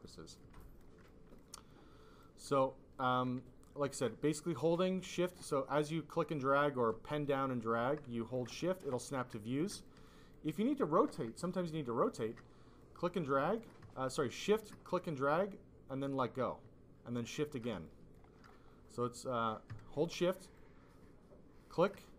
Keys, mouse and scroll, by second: 0.0 click, 0.5 alt+click, 1.0 click, 1.6 alt+click, 3.2 f, 4.2 click, 4.2 f, 5.7 click, 8.6 alt+click, 10.3 alt+click, 11.6 alt+click, 12.7 click, 14.1 shift+click, 17.8 alt+click, 20.5 shift+click.